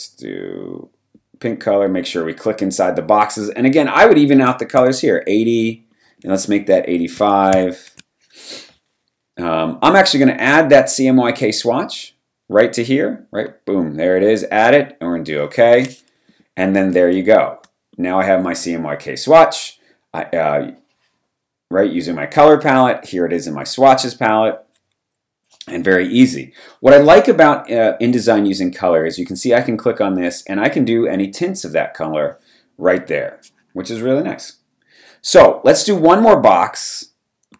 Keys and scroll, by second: 4.4 BackSpace, 4.7 0, 7.1-7.9 typing, 16.9 v, 17.1 space.